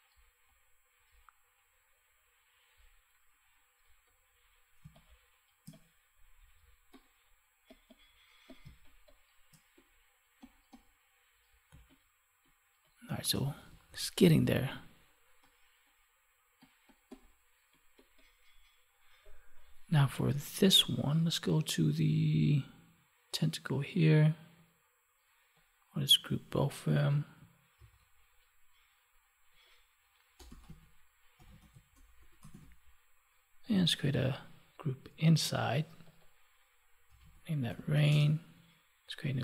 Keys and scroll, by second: 4.7 space, 8.5 space, 11.6 space, 13.8 ctrl+s, 27.6 ctrl+g.